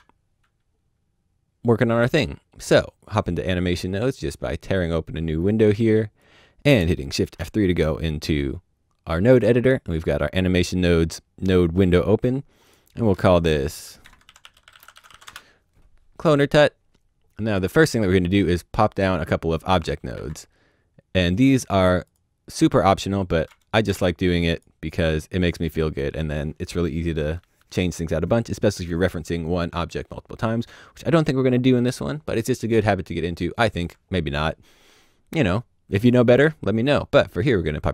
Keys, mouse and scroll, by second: 5.4 click, 7.2 shift+F3, 12.6 click, 14.0 shift+middle click, 14.2 click, 14.4-15.1 typing, 15.2 Return, 19.8 shift+click, 20.1 shift+a, 21.5 click, 23.8 shift+d, 24.5 click, 33.2 click, 35.9 click, 37.6 click.